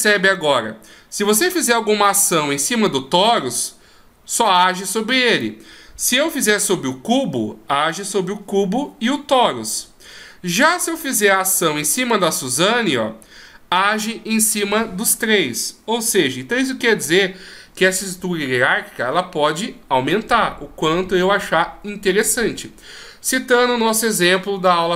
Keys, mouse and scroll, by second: 5.3 right click, 6.1 g, 10.7 right click, 11.6 g.